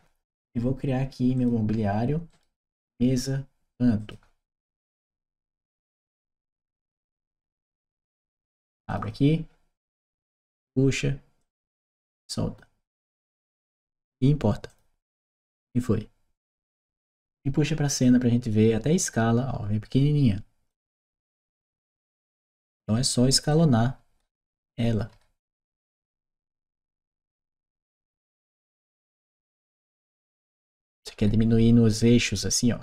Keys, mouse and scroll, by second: 1.2 click, 2.1 click, 3.8 click, 5.0 shift+m, 7.3 Return, 8.7 click, 9.8 click, 11.2-12.4 drag, 14.5 click, 16.4 click, 17.9-20.5 drag, 22.3 click, 23.3-25.9 right drag, 24.1-25.0 typing, 26.9 click, 28.1-30.5 drag, 30.7-31.8 right drag, 32.7 click.